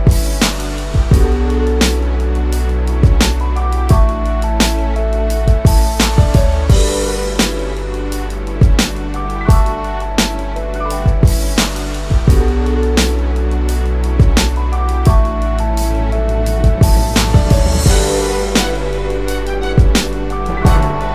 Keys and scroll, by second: 16.9 space, 19.2-20.1 space.